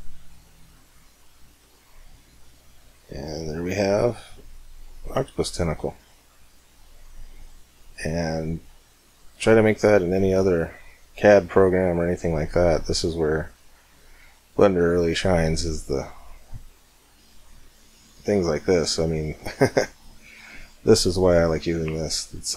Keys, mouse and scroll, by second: 1.4 Tab, 2.1-3.8 middle drag, 14.8-17.2 middle drag, 19.9-22.5 middle drag.